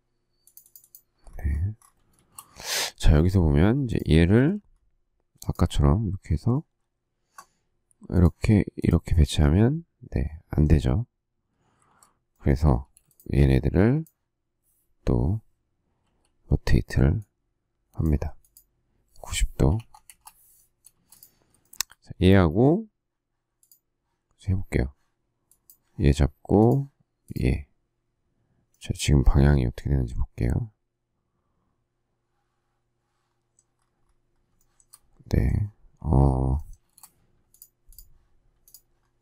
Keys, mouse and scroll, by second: 2.6 shift+z, 11.8 ctrl+z, 12.8 space, 16.0 q, 19.4-20.9 typing, 21.6 shift+middle click, 34.6 shift+middle click, 36.8 space.